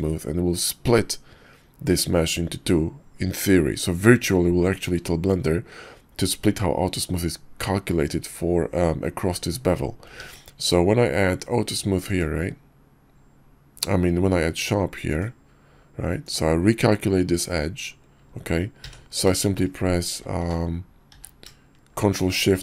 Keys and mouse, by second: 10.2 ctrl+`, 18.8 q, 20.1 q, 20.4 q, 21.1 q.